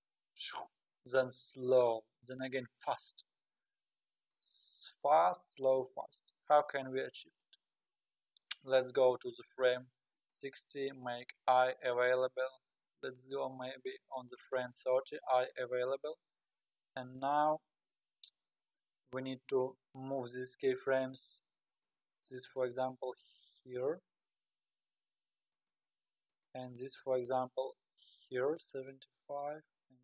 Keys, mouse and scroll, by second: 7.4-11.2 drag, 11.2 i, 13.1-15.0 drag, 15.0 i, 17.1 click, 21.4 g, 26.3 click, 26.8 g, 29.2 click.